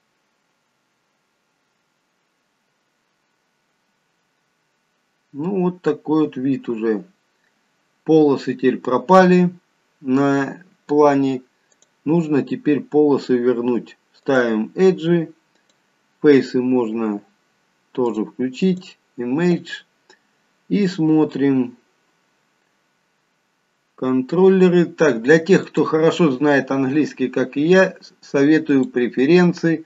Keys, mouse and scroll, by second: 14.3 click, 15.6 click, 18.1 click, 18.7 click, 25.6 click.